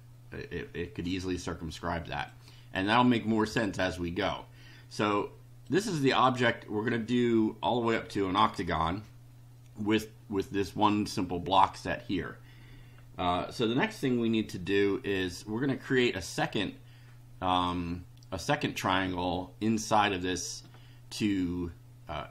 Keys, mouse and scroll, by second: 2.3-2.9 drag, 5.6-6.4 drag.